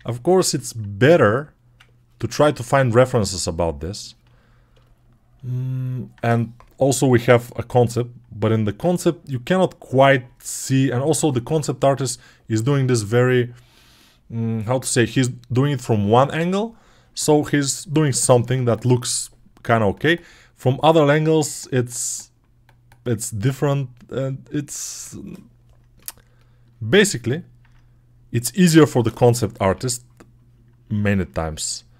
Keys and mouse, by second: 2.5-5.4 alt+drag, 5.4-26.6 alt+shift+right drag, 26.7 alt+middle click, 28.8 x, 29.4 [, 29.6 [, 30.9-31.9 alt+drag.